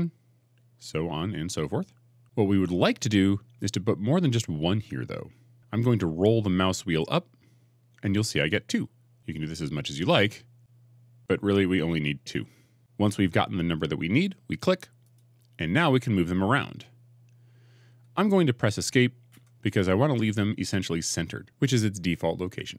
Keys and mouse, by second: 19.1 Escape.